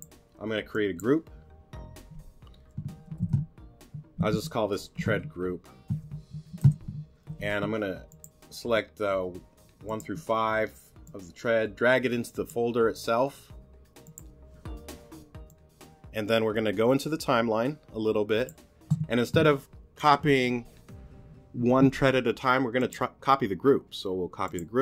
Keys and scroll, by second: 2.8 t.